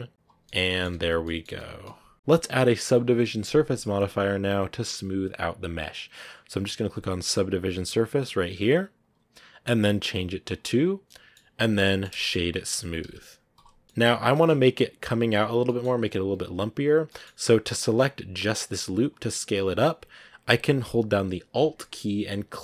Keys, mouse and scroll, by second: 0.3 middle click, 0.8 Tab, 0.9 scroll down 2, 1.1 middle click, 1.6 z, 1.7-5.3 middle drag, 10.4 click, 11.0-12.0 middle drag, 12.0 scroll down 1, 12.0 shift+middle click, 12.5-12.9 scroll up 3, 13.5 w, 13.8 shift+middle click, 14.1 scroll down 1, 14.2-16.0 middle drag, 16.0 Tab, 17.0-19.9 middle drag, 19.9-22.4 scroll up 1.